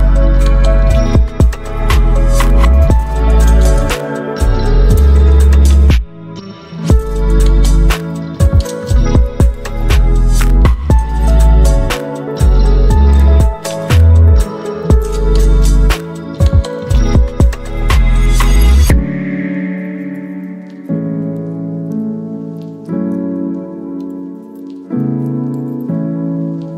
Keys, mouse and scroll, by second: 7.9-12.9 alt+drag, 12.9-19.4 alt+drag, 19.4-22.6 alt+drag.